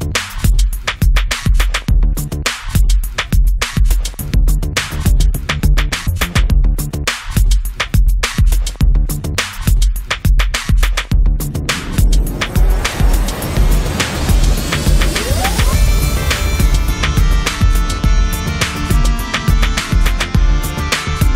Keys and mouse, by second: 1.1 shift+a, 2.6 click, 2.6 right click, 3.2 s, 3.9 click, 4.3 s, 4.9-6.5 drag, 6.1 s, 6.7 click, 7.6 click, 8.3 KP_1, 9.0 1, 9.4-11.1 drag, 11.1 middle click, 11.2-15.6 drag, 15.7 middle click, 15.8-19.8 drag, 19.8 middle click, 19.9-21.3 drag.